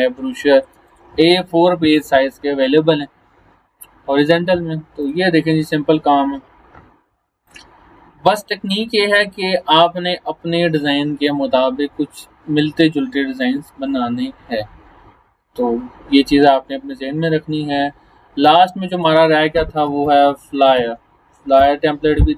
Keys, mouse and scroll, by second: 0.2 space, 0.4 click, 0.7 space, 0.9 click, 5.0 click, 7.5 click, 9.5 scroll down 1, 16.7 scroll up 1, 17.3 scroll up 1, 18.4-19.0 drag, 19.7-21.3 typing, 21.6 Return.